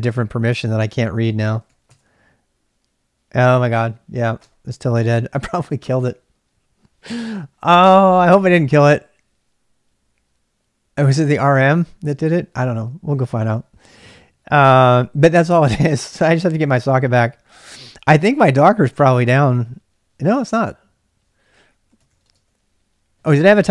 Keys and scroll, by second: 0.0-2.4 typing, 4.9-5.7 typing, 18.2 ctrl+c, 18.4-19.5 typing, 20.9-23.7 typing, 23.3 ctrl+[.